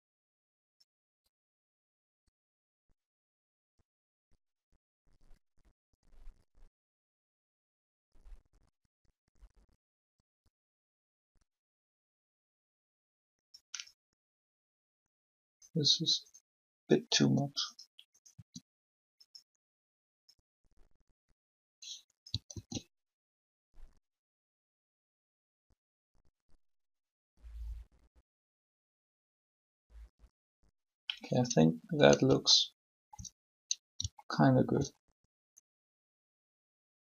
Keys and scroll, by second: 17.2 r, 22.5 alt+a.